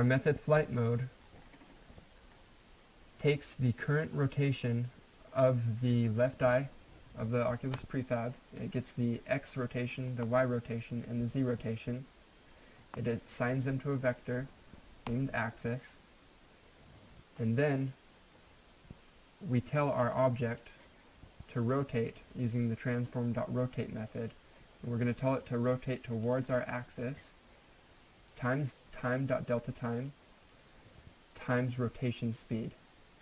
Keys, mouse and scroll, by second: 18.4-19.9 scroll down 1, 20.4 click, 26.1 click, 28.6 click.